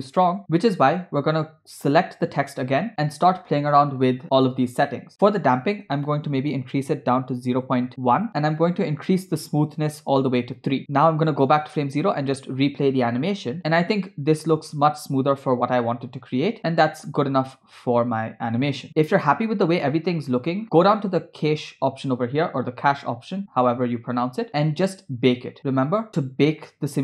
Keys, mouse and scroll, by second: 2.0 click, 3.2-4.1 scroll down 7, 5.4-10.4 drag, 11.0 click, 11.7 space, 20.6 scroll down 3, 21.6 click, 22.1 scroll down 2.